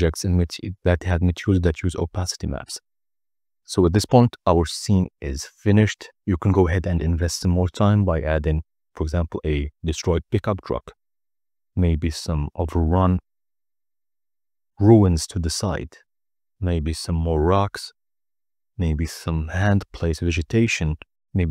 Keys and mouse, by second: 5.7-16.0 drag, 7.4 0.